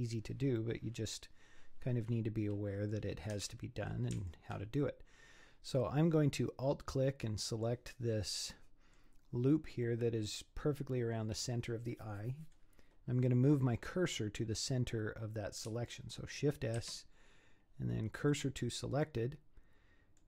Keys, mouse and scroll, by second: 0.6-3.5 middle drag, 3.5 Tab, 4.2 alt+click, 4.8-7.9 middle drag, 8.1-8.5 scroll up 4, 8.5 middle click, 9.3-9.9 scroll down 5, 9.9-13.0 middle drag, 16.8 shift+s, 19.0-20.2 middle drag.